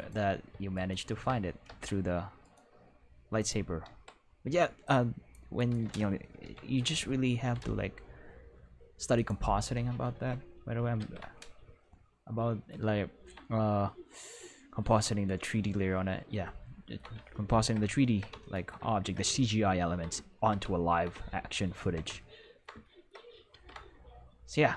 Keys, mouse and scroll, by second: 0.7 shift+right click, 1.6 c, 2.4 right click, 3.3 click, 3.8 c, 4.8 click, 5.5 right click, 6.4 ctrl+l, 7.4 g, 7.6 x, 9.1 click, 10.1 Tab, 10.9 ctrl+s, 14.9-15.4 ctrl+middle drag, 23.5 ctrl+s.